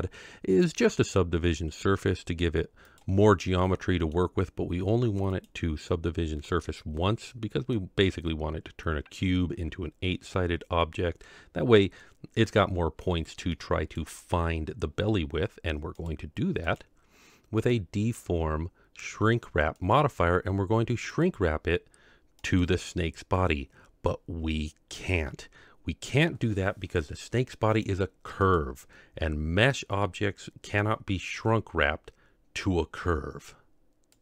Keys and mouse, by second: 3.5 middle click, 5.4 click, 7.2-7.7 middle drag, 13.5-13.9 middle drag, 16.0 click, 16.8-19.9 drag, 26.1-28.5 drag, 30.1-30.8 middle drag.